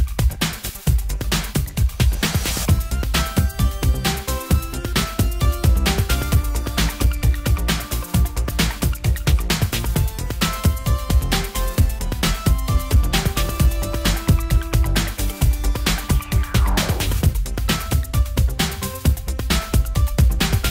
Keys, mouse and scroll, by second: 1.2 shift+z, 2.5 shift+z, 5.8 middle click, 6.6 right click, 9.3 click, 10.4-12.0 drag, 17.0 shift+z, 17.5 shift+z.